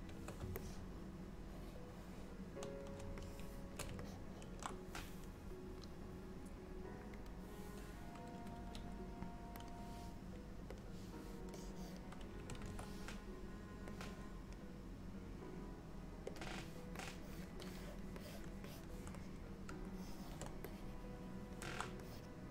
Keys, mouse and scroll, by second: 0.7 middle click, 3.3 shift+middle click, 4.1 ctrl+middle click, 7.3 click, 8.7 f, 10.8 click, 11.6 click, 12.7 ctrl+z, 14.0 click, 16.4 click, 17.0 click, 17.7 click, 18.2 click, 18.7 click, 19.3 middle click, 20.0 shift+middle click, 20.7 middle click, 22.1 click.